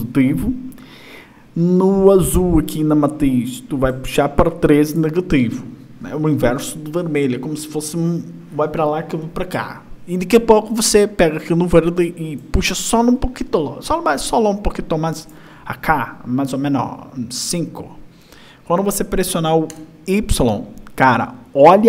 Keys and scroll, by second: 20.6 y.